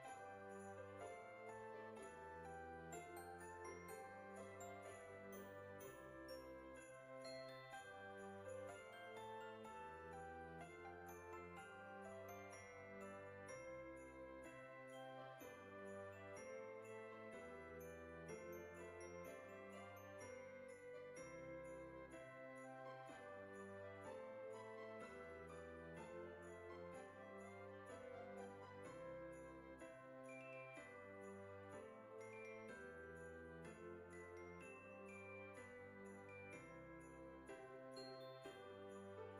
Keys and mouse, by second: 0.2 Tab, 1.1 click, 2.4 click, 3.6 click, 4.8 Tab, 6.9 click, 8.2 alt+shift+click, 9.4 click, 12.6 o, 13.1 middle click, 14.0 shift+middle click, 15.7 e, 18.7 click, 19.3 e, 21.0 click, 21.2 e, 25.5 click, 26.3 g, 27.6 click, 28.7 alt+shift+click, 30.2 alt+shift+click, 31.1 middle click, 31.7 alt+shift+click, 32.5 alt+shift+click, 33.7 ctrl+z, 33.9 middle click, 34.8 alt+shift+click, 35.6 middle click, 36.7 e, 38.5 click, 39.0 middle click.